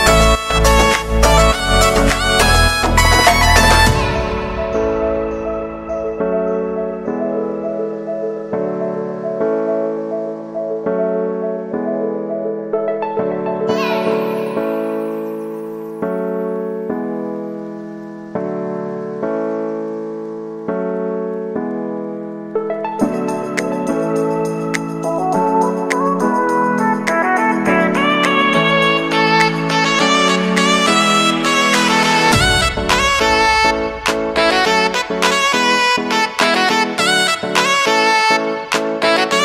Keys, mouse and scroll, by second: 0.8 space, 2.7 space, 3.8 click, 4.3 space, 6.2 space, 7.4 click, 8.5 ctrl+d, 9.3-10.8 drag, 10.8-11.2 scroll down 1, 12.1-14.6 drag, 14.6-15.4 scroll up 1, 16.1 click, 16.6-17.0 typing, 18.0 click, 20.2 shift+click, 21.0 ctrl+d, 22.0-23.6 drag, 23.6 scroll down 1, 24.8-27.0 drag, 29.1 ctrl+n, 30.2-32.0 typing, 33.5 click, 36.9 Return, 39.1-39.4 drag.